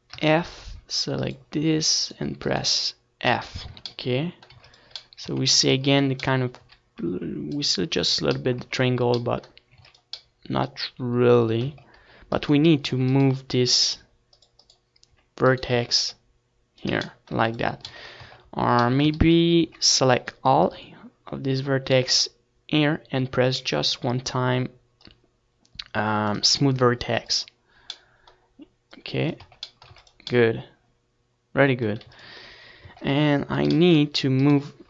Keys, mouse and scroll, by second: 0.7 f, 1.6 click, 2.3 middle click, 3.3 right click, 3.4 f, 3.8 Tab, 4.5 ctrl+s, 5.5 Tab, 6.3 a, 6.7 c, 7.3 click, 8.2 Tab, 9.2 ctrl+s, 10.9 Tab, 11.6 z, 11.9 z, 13.7 z, 14.3 z, 15.2 Tab, 15.6 ctrl+s, 16.4 Tab, 17.1 a, 17.7 c, 24.4-27.1 right drag, 25.2-28.4 drag, 25.8-27.1 middle drag, 27.1 Tab, 27.6 ctrl+s, 29.7 ctrl+s, 30.4 Tab, 31.1 a, 31.8-34.8 middle drag, 34.7 click, 34.7 right click.